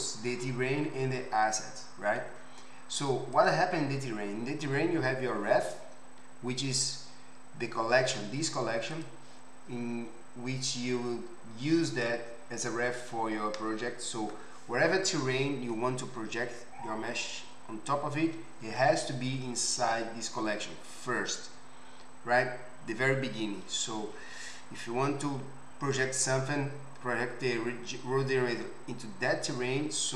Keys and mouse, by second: 3.3 click, 3.5-9.0 middle drag, 9.0 click, 9.1-12.0 middle drag, 12.0-30.1 drag.